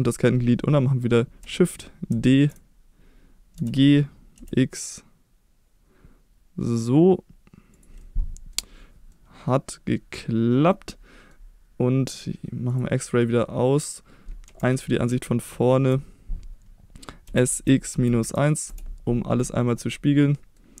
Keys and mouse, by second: 2.1 shift+d, 2.4 shift+click, 3.6 g, 4.4 x, 7.7 click, 8.0-8.5 middle drag, 9.2-9.8 middle drag, 10.2-11.3 middle drag, 12.7-13.2 drag, 13.2-14.0 middle drag, 14.5 KP_1, 15.3-15.7 shift+middle drag, 17.3 s, 17.5 x, 17.9 -, 18.2 1, 18.7 Return, 19.8-20.6 middle drag.